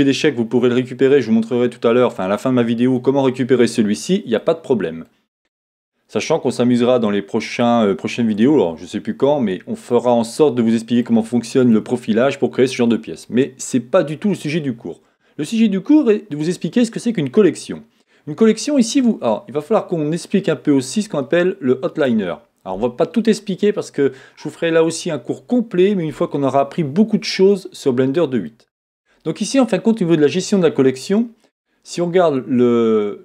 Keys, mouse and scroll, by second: 21.1 click, 27.5 middle click.